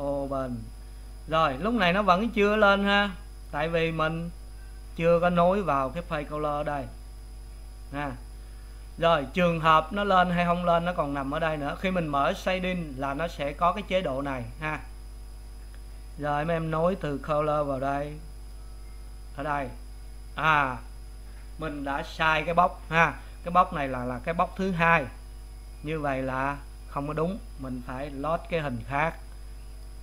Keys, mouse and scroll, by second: 2.6 click, 8.6 click, 9.9 click, 10.4 click, 10.8 click, 11.3 click, 11.8 click, 18.5-20.6 drag, 20.6-23.1 middle drag, 23.1-23.7 scroll up 2, 23.7-27.6 middle drag.